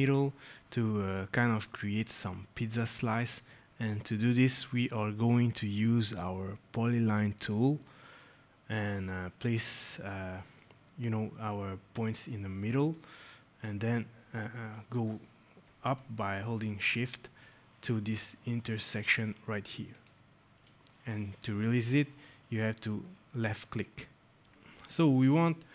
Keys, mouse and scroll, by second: 7.9 click, 11.2 scroll, 12.7 click, 14.8 scroll, 19.8 shift+click, 23.3 right click, 25.1 right click.